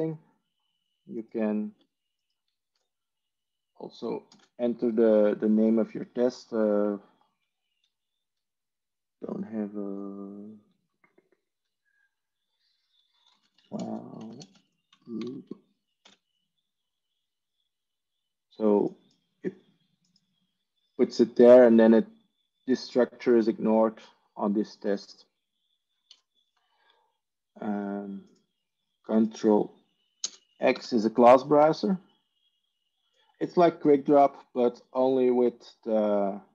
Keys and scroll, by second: 3.4 Delete, 4.4 ctrl+space, 13.0-15.2 typing, 16.0 ctrl+v, 26.1 Delete, 31.4 ctrl+space, 31.4 ctrl+x.